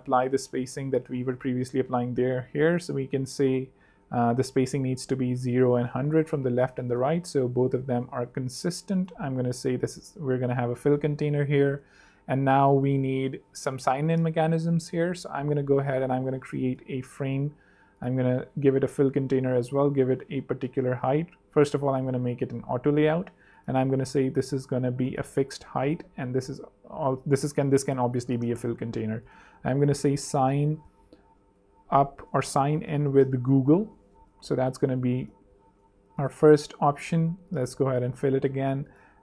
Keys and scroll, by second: 2.1-5.3 typing, 5.4 Return, 10.8 super+3, 11.7 super+2, 15.2 a, 20.8 shift+a, 22.2 t, 22.9 v, 27.1 Escape, 27.6-34.2 typing, 28.7 Escape, 32.4 alt+BackSpace.